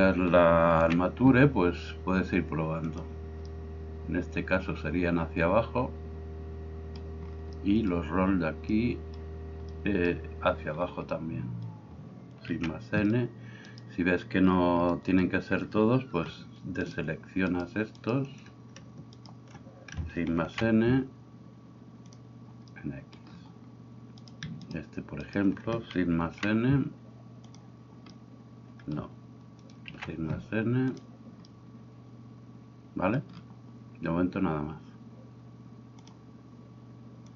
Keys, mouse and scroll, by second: 0.9 shift+n, 12.4 shift+n, 16.8-18.3 shift+right drag, 19.2 shift+right click, 20.4 shift+n, 24.2 right click, 25.2 shift+right click, 26.2 shift+n, 30.0 shift+n.